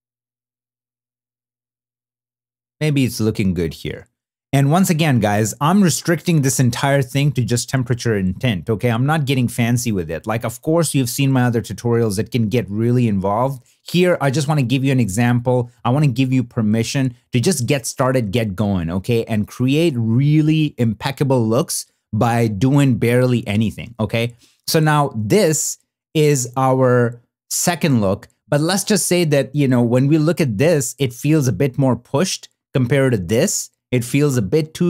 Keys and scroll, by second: 14.7 shift+d, 24.3 shift+d, 26.1 shift+d, 29.8 super+b, 32.6 n, 34.1 b, 34.3 n.